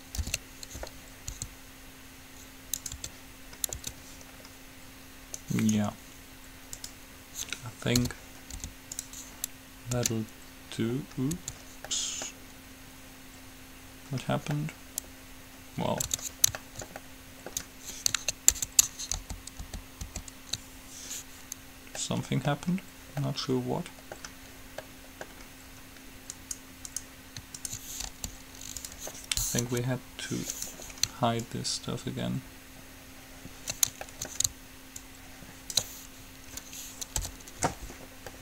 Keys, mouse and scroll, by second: 0.4 ctrl+l, 1.6 s, 3.2 Tab, 4.0 Tab, 8.3 p, 8.9 u, 10.2 Tab, 11.6 Tab, 16.4 Tab, 18.9 Tab, 19.4 ctrl+z, 19.9 ctrl+z, 20.4 ctrl+z, 26.6 right click, 28.2-29.4 right drag, 28.2 g, 29.9 KP_3, 30.7-32.8 right drag, 31.7-33.0 drag, 34.4 middle click, 35.1-36.9 drag, 37.4 h.